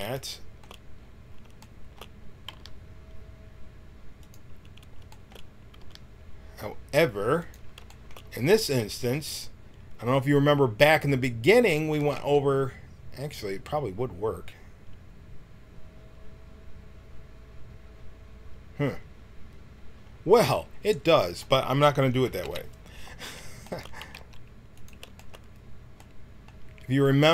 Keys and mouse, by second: 2.4 g, 5.8 g, 11.9 g, 13.6-15.1 middle drag, 22.6 KP_1, 24.0 g.